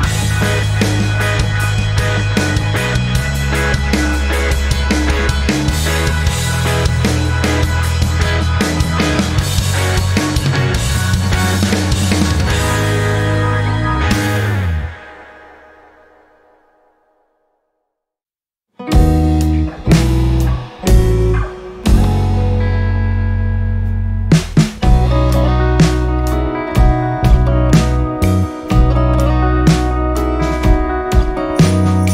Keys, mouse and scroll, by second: 0.2 Delete, 2.0-29.3 drag, 29.3-31.9 drag, 31.9 ctrl+scroll down 1.